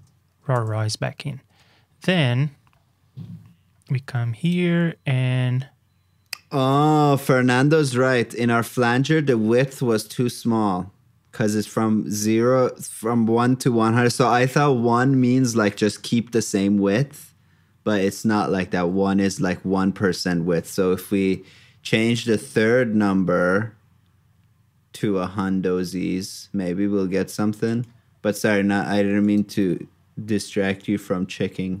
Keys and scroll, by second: 29.6 super+c.